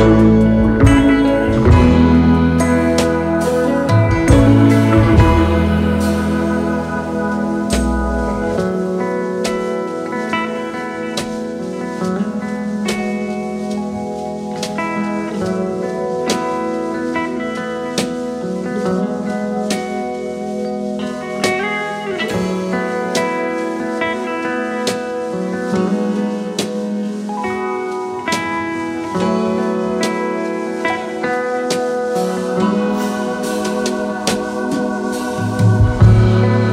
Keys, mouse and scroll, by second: 0.8 shift+click, 1.6 shift+click, 1.8 shift+click, 2.4 alt+click, 6.6 alt+s, 6.9 shift+click, 7.4 alt+click, 10.0-10.5 space, 23.0-23.5 typing, 26.0-27.9 typing, 26.2 double click, 27.6 alt+scroll up 2, 31.9-33.1 typing, 34.1 alt+scroll up 1, 36.2 alt+scroll down 1, 36.3 space.